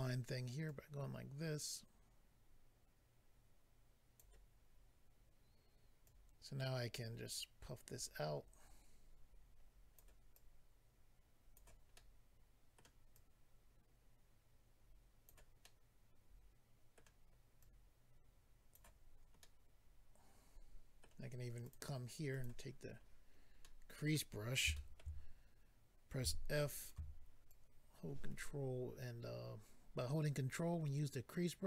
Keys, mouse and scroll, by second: 0.7 click, 6.0 click, 10.3 click, 12.8 middle click, 13.1 click, 15.6 middle click, 17.6 click, 19.4 middle click, 21.6 click, 21.7 click, 22.3 click, 22.4 click, 22.8 scroll up 2, 23.6 middle click, 24.1 scroll up 1, 24.7 shift+middle click, 25.2 scroll up 2, 26.2 f, 26.8 click, 27.5 ctrl+click.